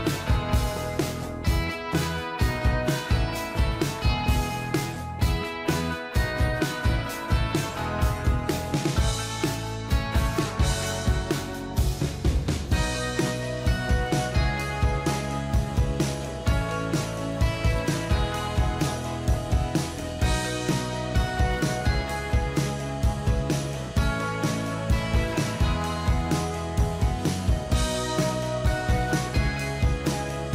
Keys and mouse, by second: 1.7 right click, 15.9 Return, 23.6 ctrl+t, 24.1 shift+click, 27.2 ctrl+j, 27.9 ctrl+t, 28.4 shift+click.